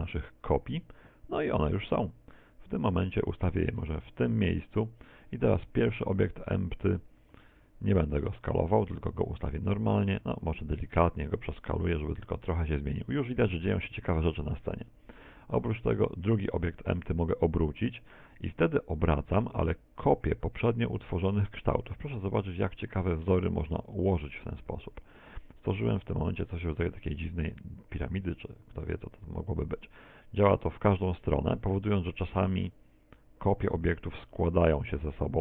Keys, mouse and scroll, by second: 6.0 click, 7.5 alt+s, 10.5 s, 13.4 click, 13.7-15.0 scroll up 3, 14.2 shift+middle click, 16.1 click, 17.0 r, 24.0 click, 24.0 shift+middle click, 24.5 middle click, 25.6 middle click, 27.6 middle click, 28.9 r, 34.2 click, 34.2 middle click.